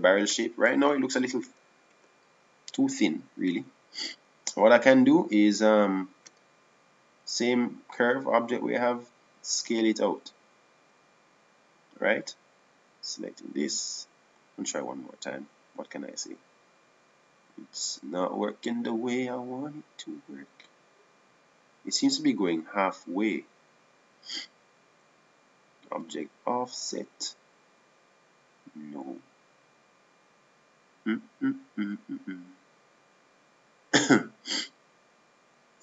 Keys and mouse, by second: 1.8 middle click, 2.4 KP_1, 3.6 KP_5, 11.4 s, 14.6 right click, 15.0 click, 16.0-17.9 drag, 22.2-23.8 drag, 27.7-30.6 drag.